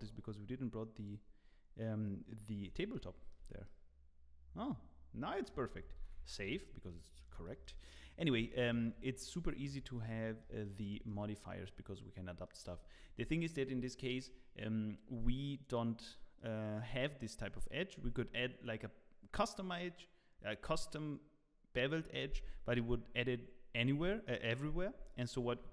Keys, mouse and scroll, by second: 2.8 z, 2.9 middle click, 3.8 Tab, 3.8 middle click, 3.8 z, 6.0 ctrl+s, 6.4 scroll down 6, 6.9 middle click, 7.4 shift+middle click, 8.1 scroll up 5, 8.4 shift+middle click, 9.5 scroll down 2, 10.0 middle click, 10.6 shift+middle click, 11.0 middle click, 12.7 shift+middle click, 12.7 scroll down 14, 13.3 shift+middle click, 14.2 shift+middle click, 14.2 scroll down 3, 16.3 middle click, 24.2 shift+middle click, 25.0 shift+middle click.